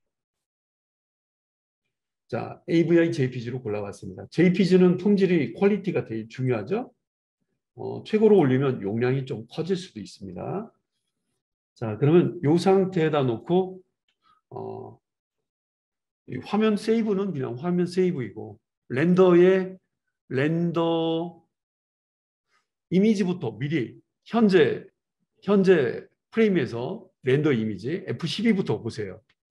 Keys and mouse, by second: 7.0-20.2 drag, 17.6 ctrl+s, 20.2-29.5 right drag.